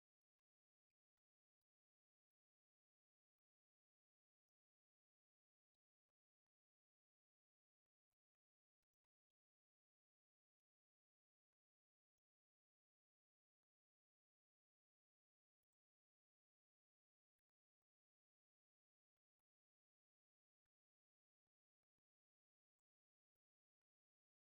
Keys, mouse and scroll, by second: 0.6 click, 1.0 click, 2.3-4.3 drag, 5.0 click, 6.3-7.7 shift+drag, 9.6 shift+click, 11.6 click, 12.7 click, 13.2 click, 14.6 middle click, 15.6 click, 16.1 alt+middle click, 17.4 middle click, 18.0 middle click, 19.9 ctrl+click, 20.9 ctrl+click, 22.0 click, 23.0 click, 23.8 alt+middle click.